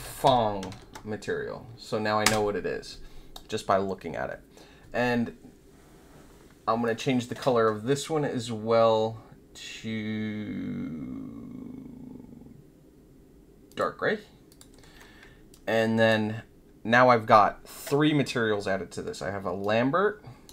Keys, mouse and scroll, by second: 0.2 g, 0.7 shift+[, 2.2 Return, 6.8 click, 13.6 click, 14.4 click, 15.5-16.0 alt+drag, 19.6-20.4 right drag.